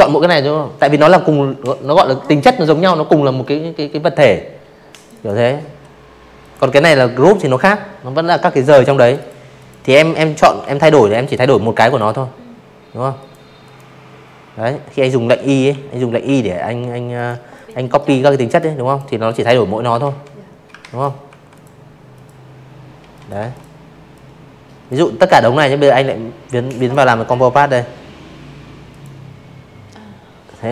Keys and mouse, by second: 1.9 click, 2.0 click, 3.3 click, 5.9 click, 6.1 click, 6.5 click, 7.5 i, 7.9 click, 8.8 click, 10.1 click, 10.6 click, 12.1 v, 12.6 i, 13.1 i, 14.1 click, 14.4 click, 14.9 click, 15.4 click, 15.8 click, 16.9 ctrl+z, 17.7 ctrl+z, 18.2 v, 18.4 click, 19.0 click, 19.9 z, 20.0 click, 20.3 v, 20.4 click, 21.0 click, 23.7 click, 25.8 click.